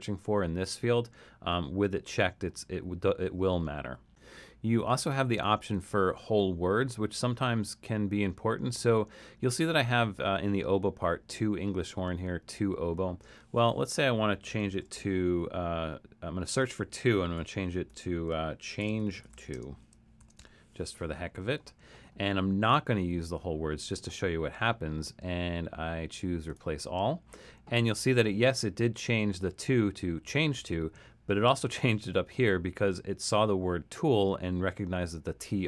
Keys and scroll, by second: 14.7 typing, 16.6 Tab, 17.4-20.9 typing.